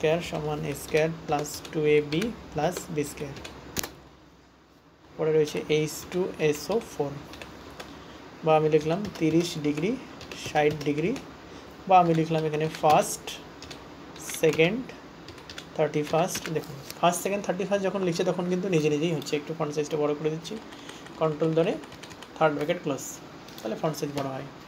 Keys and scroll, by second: 0.0-4.2 typing, 20.5 ctrl+].